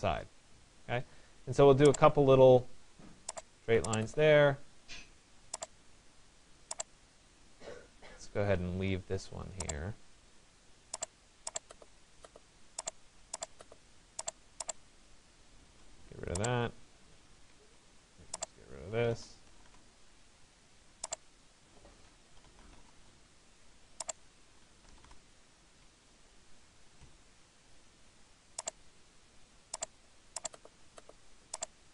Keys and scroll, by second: 8.3 Escape, 15.3 Delete.